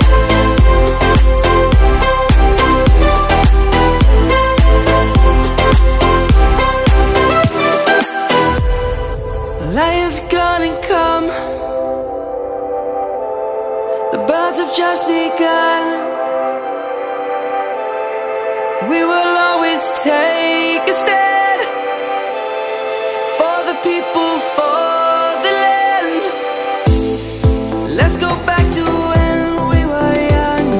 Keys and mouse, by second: 0.6 click, 1.7 middle click, 4.3 alt+shift+click, 5.3 alt+shift+click, 5.4 alt+shift+click, 5.8 alt+shift+click, 6.1 alt+shift+click, 6.3 alt+shift+click, 6.5 alt+shift+click, 7.4 middle click, 8.8 middle click, 10.6 click, 11.4 middle click, 14.9 ctrl+shift+click, 17.8 e, 20.2 right click, 20.6 middle click, 22.1 s, 24.2 click, 24.7 middle click, 25.1 Tab, 25.6 middle click, 28.0 Tab, 28.7 middle click.